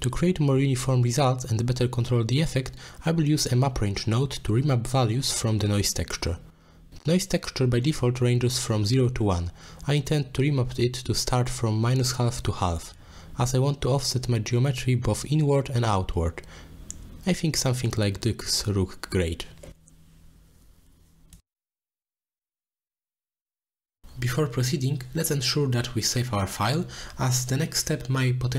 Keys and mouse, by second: 0.9 middle click, 3.0 middle click, 3.3-3.9 drag, 4.2 g, 5.0 click, 5.4 middle click, 5.8 click, 6.0 g, 6.5 click, 7.0-9.0 drag, 11.6-12.2 middle drag, 12.2 click, 12.4-13.5 middle drag, 15.4 middle click, 18.2 middle click, 19.4-21.0 drag, 22.2-23.4 middle drag, 23.8 middle click, 24.6 shift+middle click, 25.7 middle click, 27.1 middle drag, 27.7-28.1 drag, 28.3 click.